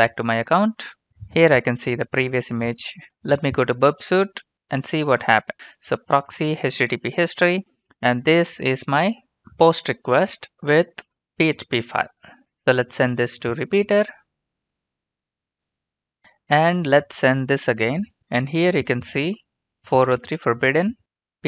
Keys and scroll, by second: 3.0 alt+Tab.